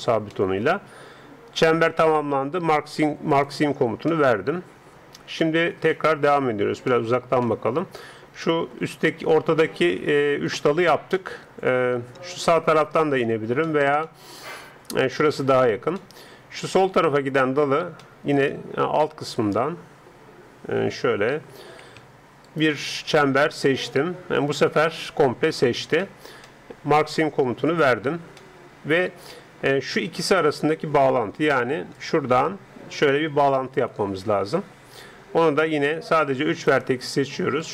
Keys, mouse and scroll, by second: 1.4 right click, 1.6 middle click, 3.3-4.6 drag, 4.1 middle click, 4.5 middle click, 4.6 middle click, 4.7 click, 5.1-10.3 middle drag, 11.2-20.4 middle drag, 20.7 a, 21.0 a, 21.6 a, 22.5 click, 23.1 alt+right click, 23.2 click, 23.3 alt+right click, 23.6 click, 26.1-27.7 middle drag, 27.7-29.5 drag, 31.5 d, 31.9-33.7 drag, 31.9-33.9 d, 34.9-36.9 d, 35.1-36.9 right drag, 37.6-37.7 right drag.